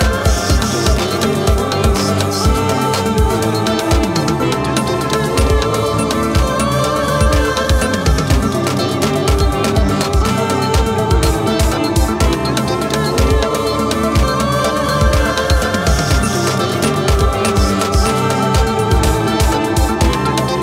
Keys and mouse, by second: 13.3 \, 14.2 Return, 16.7 -, 18.6 ctrl+=, 19.4 ctrl+=, 20.0 ctrl+=.